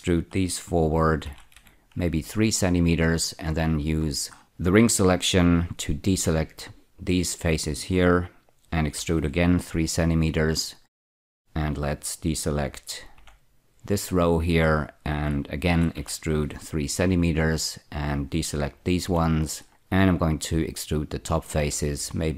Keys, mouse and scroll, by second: 1.2-1.5 typing, 2.1 Return, 4.0-4.9 scroll up 1, 8.9 typing, 9.9 Return, 15.6 typing, 17.0 Return, 21.5-21.9 typing.